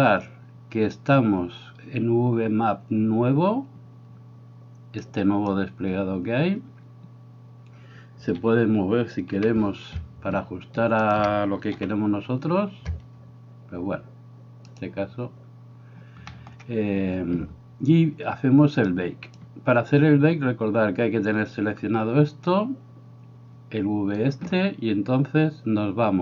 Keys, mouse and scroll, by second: 5.3 click, 8.4 a, 9.4 r, 11.8 g, 16.4 shift+middle click, 18.9 click.